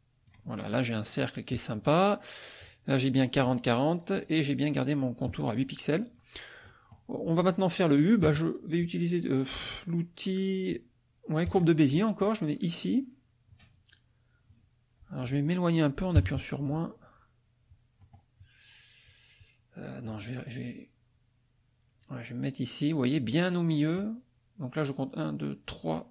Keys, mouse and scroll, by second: 6.6 middle click, 11.5 click, 16.2 KP_Subtract, 18.0 click, 20.1 click.